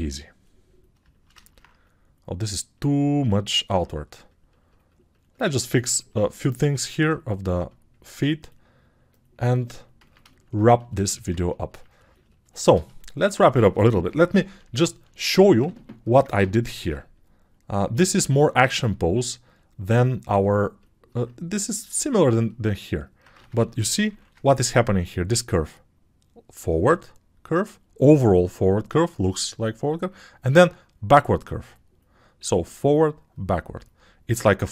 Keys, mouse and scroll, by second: 9.6 click, 9.6 middle click, 9.6 right click, 24.0 ctrl+shift+7.